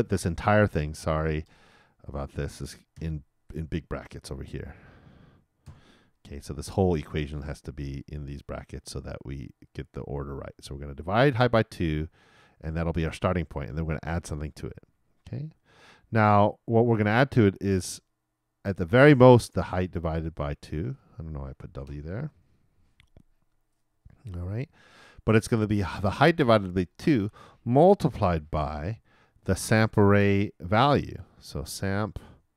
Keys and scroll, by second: 2.9 shift+9, 5.6 shift+0, 28.3 shift+8.